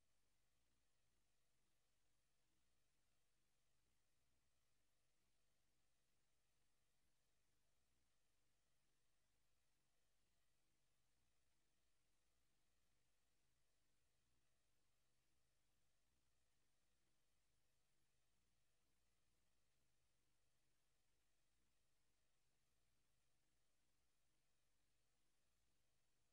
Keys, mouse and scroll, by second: 0.0 Escape, 0.8 scroll down 1, 4.7 click, 5.6 middle click, 7.1 click, 8.9 click, 10.3 shift+d, 11.5 click, 14.5 click, 15.1 shift+d, 17.3 r, 18.3 click, 19.6 shift+d, 21.2 click, 21.6 b, 23.2 click, 23.5 middle click, 25.6 click.